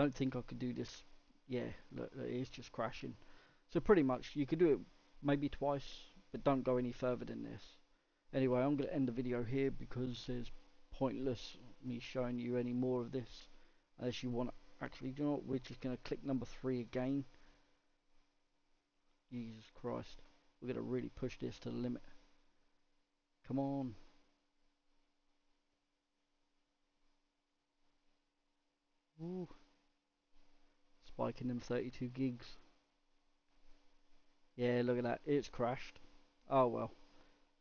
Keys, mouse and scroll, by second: 9.8 click, 12.4-12.9 scroll down 1, 12.9-21.9 scroll up 1.